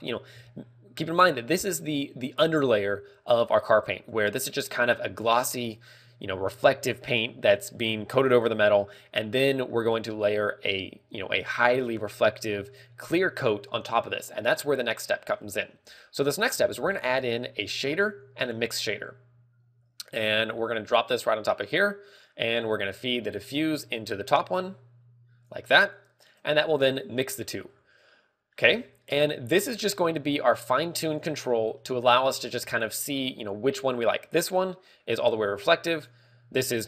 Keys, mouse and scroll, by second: 21.6 g, 28.0 e, 28.4 right click, 32.1 scroll up 3, 32.5 scroll, 34.4 click, 34.4 scroll up 4.